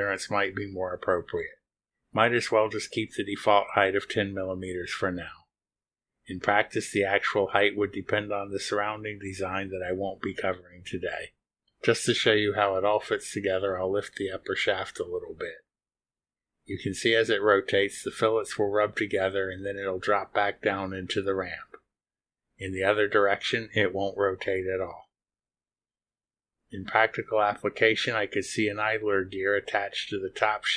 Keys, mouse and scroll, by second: 0.4 click, 1.0 click, 2.9-4.5 typing, 12.2 click, 16.0 click, 19.3-30.7 drag.